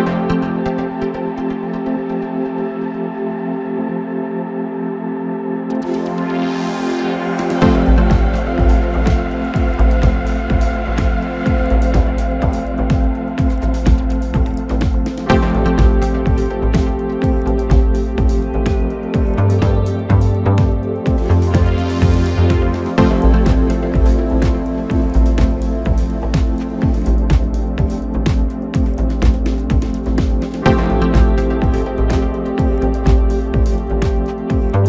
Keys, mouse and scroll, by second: 0.5-2.6 drag, 2.6 1, 3.8-7.0 middle drag, 10.9 click, 11.4 middle click, 12.1-12.6 scroll up 1, 12.6 2, 13.3 click, 13.9 shift+click, 14.5 shift+click, 15.4 KP_1, 16.3-16.7 scroll up 1, 16.7 g, 21.3 click, 21.9 shift+click, 22.4 shift+click, 23.2 g, 28.2 scroll down 2, 28.5 Tab, 28.9-32.0 middle drag, 34.4 Tab.